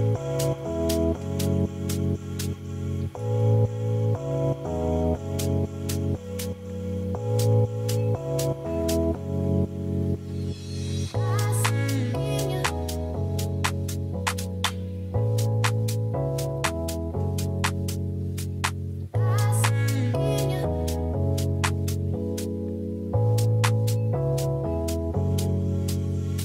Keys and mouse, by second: 0.6 shift+middle drag, 1.8 ctrl+s, 2.1 click, 2.8-4.6 drag, 5.6 shift+middle drag, 6.1 ctrl+s, 7.3 shift+middle drag, 8.2 shift+middle click, 9.0 click, 10.2-11.6 drag, 13.1 shift+middle drag, 13.8 click, 14.4 shift+middle drag, 14.8 click, 15.4 KP_Decimal, 16.0 middle click, 16.4 shift+middle click, 16.5 click, 18.1 click, 21.1 click.